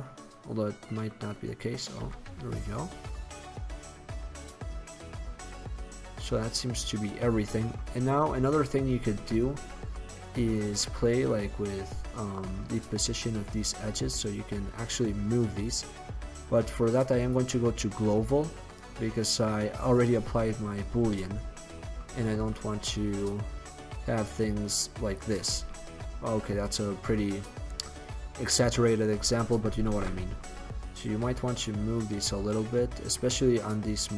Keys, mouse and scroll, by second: 2.2 x, 7.2 middle click, 11.6 right click, 15.9-17.8 drag, 17.8-21.3 middle drag, 25.3-26.7 drag, 26.7-28.0 middle drag, 30.0 ctrl+z, 31.4 click.